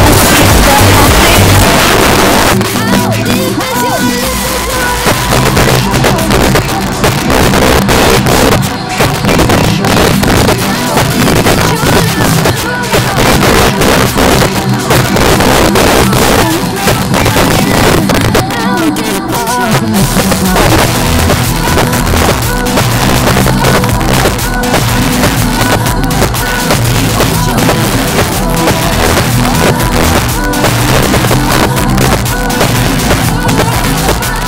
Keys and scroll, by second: 1.6 Page_Down.